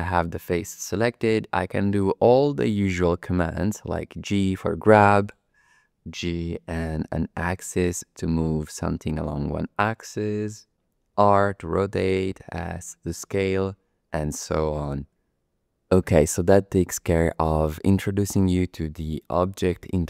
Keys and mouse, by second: 3.9 g, 6.2 g, 7.0 x, 9.8 click, 11.2 r, 12.4 s.